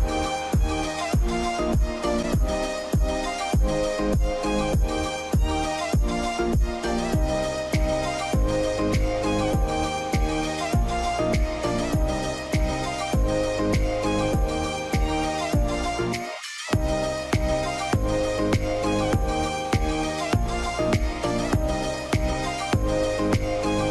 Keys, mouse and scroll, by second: 0.0 scroll down 1, 0.5 q, 1.1 scroll down 1, 1.4 alt+middle click, 2.0 scroll up 1, 2.5 scroll down 1, 2.6 alt+middle click, 9.1-10.0 scroll down 1, 14.0-14.9 scroll down 1, 14.9-16.1 scroll up 1, 16.1 right click, 20.1 right click.